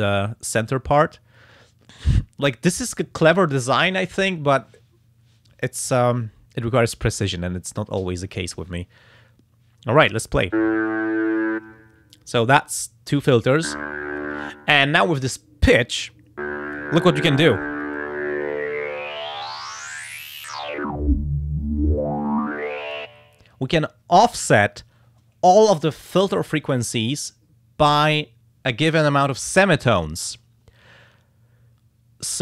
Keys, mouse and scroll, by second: 17.8-23.1 drag.